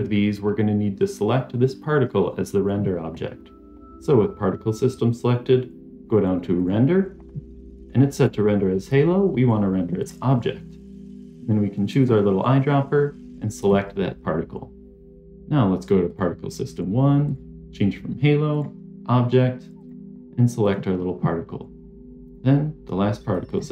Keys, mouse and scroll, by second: 6.5 click, 8.1-10.2 drag, 11.8 click, 16.0 click, 17.2-18.6 drag, 19.7 click, 22.2-23.7 drag.